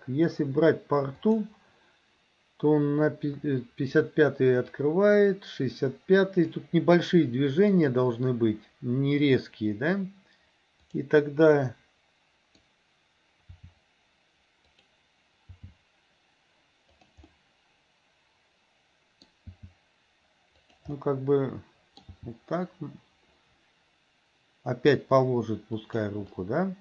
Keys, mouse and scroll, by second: 1.3 click, 4.9-6.7 drag, 10.9 click, 11.6-12.6 middle drag, 13.6 r, 15.6 g, 17.3-19.3 middle drag, 19.6 g, 21.0-22.1 middle drag, 22.3 g, 26.3-26.8 middle drag.